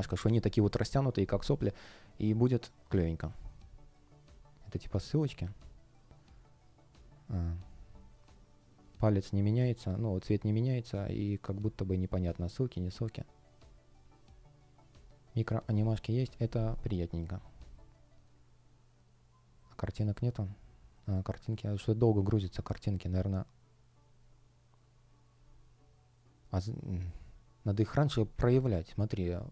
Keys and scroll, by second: 21.6 v.